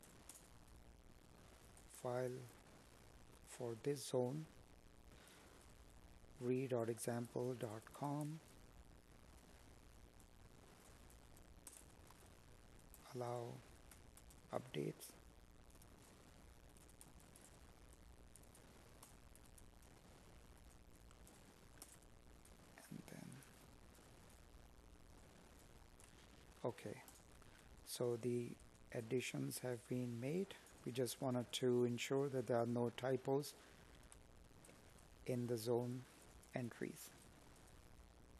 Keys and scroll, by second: 8.9 Tab, 12.8 space, 13.8 space, 15.5 space, 16.5 space, 19.0 Tab, 24.3 Escape, 25.1 Down, 26.0 Up, 27.7 Up, 31.9 space, 35.9 space.